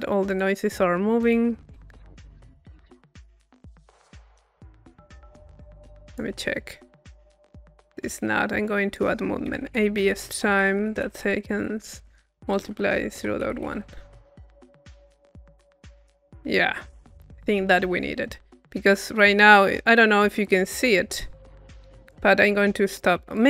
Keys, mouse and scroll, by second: 0.3-1.5 drag, 2.3 click, 4.4 click, 5.2 click, 5.2 middle click, 5.4 click, 5.6 middle click, 6.1 click, 6.6 middle click, 8.7 click, 14.8-15.9 drag, 16.1-17.0 scroll up 1, 20.4 click, 21.5 click, 22.0-23.4 drag.